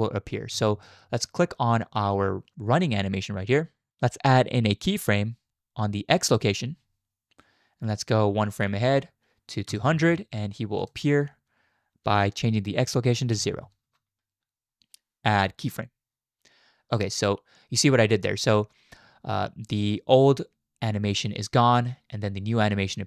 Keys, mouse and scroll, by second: 0.5 Left, 6.3 click, 9.7 Right, 10.8-13.9 drag, 15.6 click, 17.0-23.0 drag.